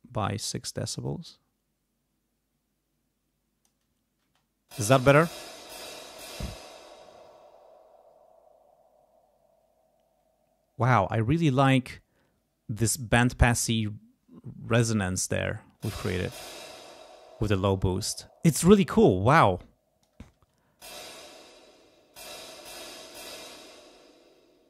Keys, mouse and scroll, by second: 4.2 space, 6.5 space, 15.3 space, 16.8 space, 18.4-20.2 drag, 20.3 space, 21.0 space, 21.1 click, 21.6 space, 23.2 space.